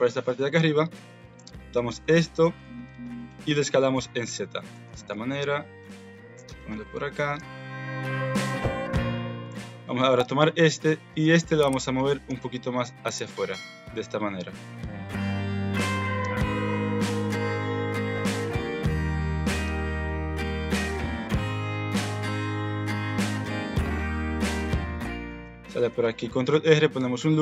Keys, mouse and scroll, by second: 0.9-2.3 drag, 3.0 shift+click, 3.7 s, 4.8 g, 5.9 g, 6.7 alt+z, 7.2 Tab, 8.6 Tab, 9.1 Tab, 9.4 click, 9.6 Tab, 10.0 alt+z, 10.7 alt+z, 11.2 click, 11.7 alt+z, 11.9 alt+click, 12.0 alt+z, 12.2 g, 13.7 click, 14.0 g, 15.5 alt+z, 15.8 click, 16.0 alt+z, 16.2 g, 18.3 click, 18.6 alt+z, 18.9 click, 19.4 alt+z, 19.6 g, 22.1 alt+z, 22.5 click, 22.9 alt+z, 23.3 g, 25.2 ctrl+r, 26.3 shift+middle click.